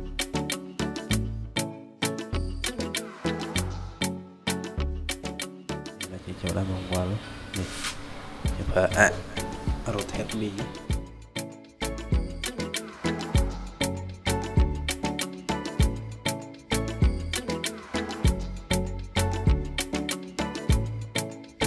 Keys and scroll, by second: 9.9 ctrl+z.